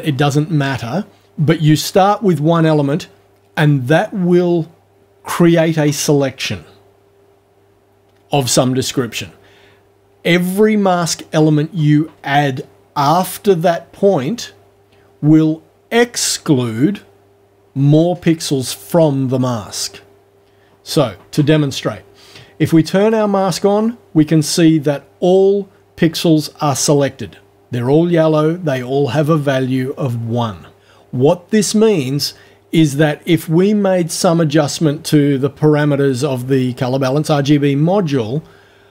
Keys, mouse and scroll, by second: 23.0 click.